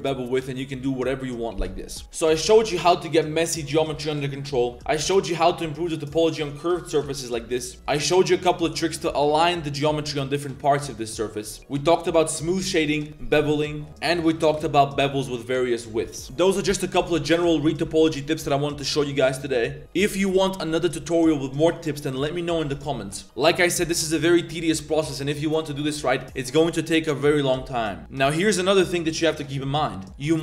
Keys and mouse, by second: 0.0 drag, 0.4 drag, 0.7 2, 2.0 Tab, 2.0 click, 2.3 3, 2.4 a, 2.5 a, 2.7 c, 4.7 2, 6.9 a, 7.0 a, 7.1 drag, 7.6-7.9 shift+drag, 8.7 click, 9.2 Tab, 10.7-11.6 drag, 11.6 Tab, 11.6 click, 12.1 Tab, 12.4 drag, 13.4-13.8 drag, 14.0 click, 14.4 shift+click, 14.5 middle click, 14.8-15.1 middle drag, 15.6 middle click, 24.2 middle click, 24.6 middle click, 28.0 middle click, 30.1 middle click.